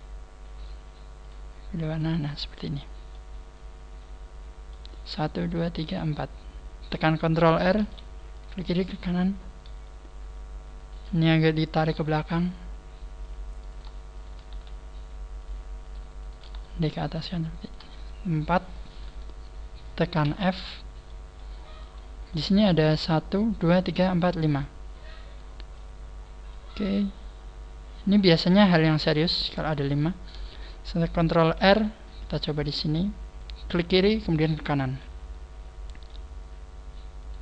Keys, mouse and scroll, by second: 1.2 click, 2.6-3.1 scroll down 3, 3.1 middle click, 7.8 ctrl+r, 9.0 right click, 9.0-9.4 scroll up 3, 10.8 right click, 10.8 scroll up 4, 11.9 g, 13.6 click, 13.6 right click, 14.1 shift+right click, 14.5 g, 15.9 shift+right click, 15.9 click, 16.2 shift+right click, 16.5 g, 17.6 shift+right click, 18.0 shift+right click, 18.3 shift+right click, 18.7 shift+right click, 20.2 f, 20.6 scroll down 4, 21.0 middle click, 21.8 right click, 22.4 middle click, 25.8 click, 26.8 middle click, 29.3 scroll down 3, 29.9 shift+middle click, 31.6 ctrl+r, 34.4 right click, 35.0 middle click, 36.4 scroll up 2, 37.0 scroll up 2, 37.2 right click.